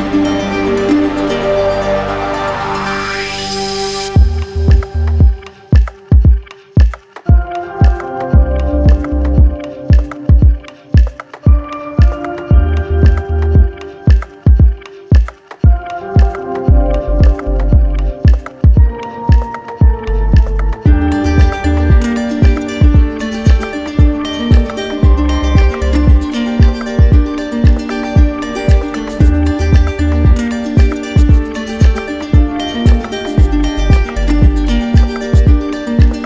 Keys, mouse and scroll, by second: 0.4 click, 1.1 click, 1.7 click, 2.3 ctrl+z, 3.0 click, 3.6 click, 4.3 click, 4.8 click, 5.4 click, 6.0 click, 7.3 click, 7.4 right click, 7.9 click, 8.5 click, 9.2 click, 9.8 click, 10.5 click, 11.1 click, 11.7 click, 12.4 click, 12.9 click, 13.5 click, 14.1 click, 14.6 click, 15.1 click, 15.6 click, 16.0 click, 16.5 click, 17.0 click, 17.4 click, 17.8 click, 19.2-20.2 alt+click, 19.7 click, 20.1 click, 20.5 alt+click, 21.0 alt+click, 21.4 alt+click, 21.9 alt+click, 22.3 alt+click, 22.8 alt+click, 23.7 alt+click, 24.1 alt+click, 24.6 alt+click, 25.1 alt+click, 25.6 alt+click, 26.0 alt+click, 26.5 alt+click, 27.0 alt+click, 27.4 alt+click, 27.8 alt+click, 28.3 alt+click, 28.7 alt+click, 29.1 alt+click, 29.5 alt+click, 29.9 alt+click, 30.4 alt+click, 30.8 alt+click, 31.2 alt+click, 31.5 alt+click, 31.9 alt+click, 32.3 alt+click, 32.7 alt+click, 33.0 alt+click, 33.3 alt+click, 33.7 alt+click, 34.6 alt+click, 35.2 alt+click, 35.8 alt+click.